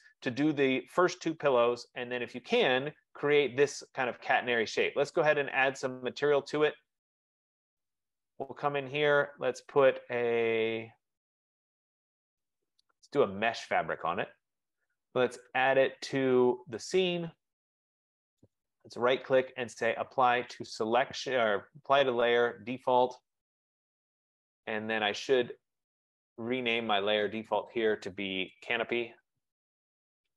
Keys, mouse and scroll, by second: 2.9 click, 7.3 click, 8.9-9.6 scroll, 10.7-12.3 scroll, 13.3 click, 14.1 right click, 17.0 click, 18.6 right click, 23.1 click, 24.5 click, 26.3 click, 27.5 click, 27.8 click, 28.8 click, 29.9-30.3 typing.